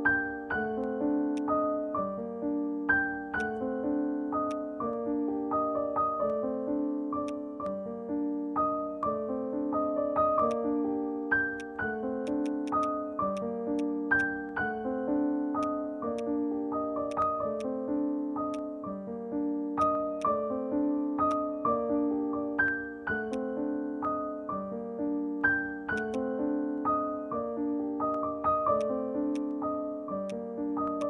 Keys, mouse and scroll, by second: 0.9 alt+middle click, 0.9 click, 1.1 scroll down 1, 1.4 alt+click, 2.2-2.6 scroll up 1, 2.6 alt+middle click, 3.0 scroll down 1, 3.4 alt+click, 4.2 alt+middle click, 7.0 alt+middle click, 7.3 alt+click, 12.8 double click, 15.6 right click, 17.1 right click, 18.5 right click, 23.4 alt+click, 26.2 right click.